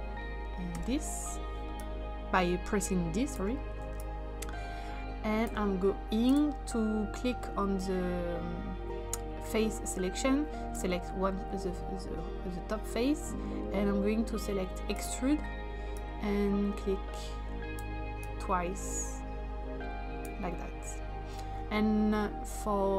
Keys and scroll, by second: 0.7 typing.